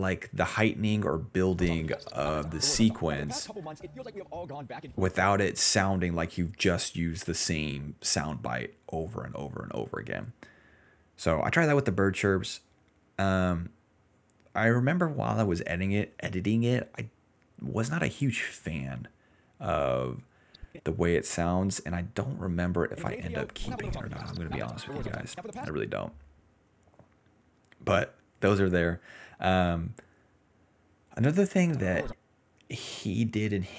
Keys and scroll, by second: 1.5 space, 2.4 s, 3.0 s, 5.2 space, 5.8 s, 7.5 ctrl+z, 8.6 d, 11.4-12.4 typing, 21.1 ctrl+s, 22.2-25.6 typing, 26.7 s, 27.5 s, 31.6 space, 31.8 d, 32.0 space.